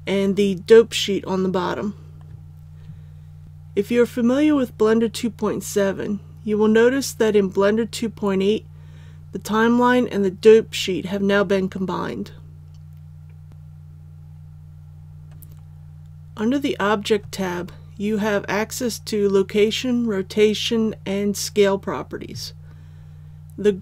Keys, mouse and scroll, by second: 13.5-18.1 scroll down 1.